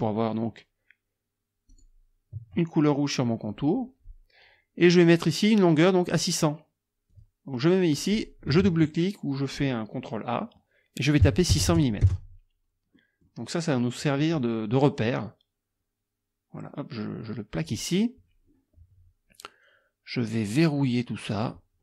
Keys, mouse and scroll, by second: 1.7 shift+click, 7.1 click, 8.0 click, 8.6 ctrl+a, 11.2 KP_6, 11.5 KP_0, 12.0 KP_Enter, 13.0 click, 14.2-17.9 drag, 21.3 click.